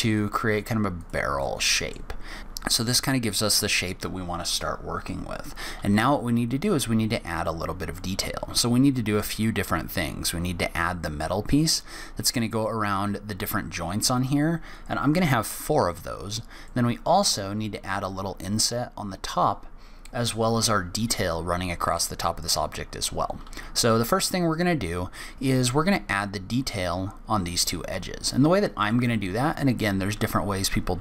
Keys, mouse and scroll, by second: 1.4 middle click, 2.0-2.4 scroll down 1, 2.4 n, 6.8-7.5 scroll up 1, 7.5-7.9 scroll down 1, 7.9 middle click, 16.6 middle click, 21.9 scroll down 1, 22.0 middle click, 22.8-23.3 scroll up 1, 23.3-25.0 scroll up 1, 28.8 click.